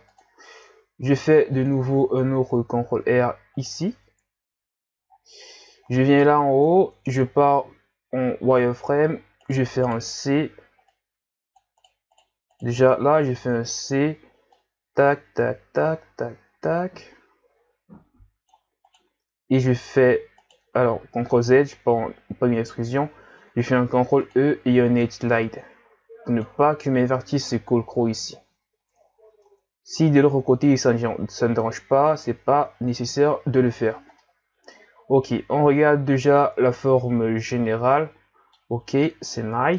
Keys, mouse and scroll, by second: 1.1 ctrl+r, 3.9 Tab, 5.1-5.9 scroll up 10, 6.2-6.7 scroll up 2, 6.7 Tab, 7.2-7.6 scroll up 3, 7.7 z, 9.5 right click, 9.9 right click, 10.1 c, 12.1 right click, 12.5 right click, 13.1 c, 19.7 e, 21.1 ctrl+z, 22.7 z, 23.6 ctrl+e, 29.1-29.4 scroll down 5, 29.4 Tab, 32.1-32.7 scroll down 1, 32.8 scroll down 4, 33.4-34.2 scroll down 7, 34.2-37.2 middle drag, 39.3 KP_1.